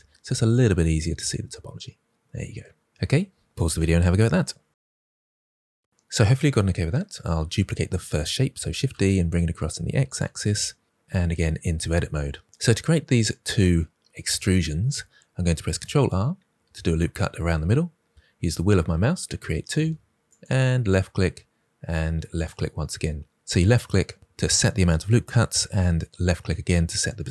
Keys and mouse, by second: 0.0-0.3 drag, 8.6 shift+d, 8.8 x, 12.3 Tab, 15.6 ctrl+r, 20.2 click, 22.3 click.